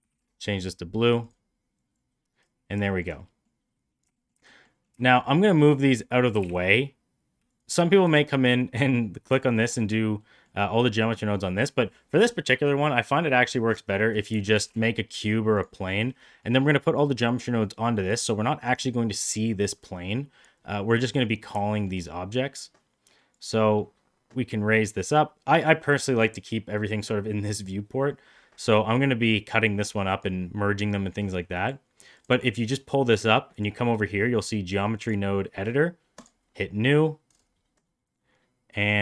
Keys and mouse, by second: 2.8 shift+middle drag, 3.1 middle drag, 4.0 shift+middle click, 4.4 middle drag, 5.0 shift+click, 5.2 shift+click, 5.5 shift+click, 6.2 g, 8.0 click, 8.4 middle drag, 9.3 shift+middle drag, 10.1 middle drag, 11.0 middle click, 14.4 shift+a, 16.1 middle click, 21.5 shift+middle drag, 23.3-25.0 drag, 31.4 click, 33.5-35.0 drag, 36.1 click, 37.6-38.8 drag.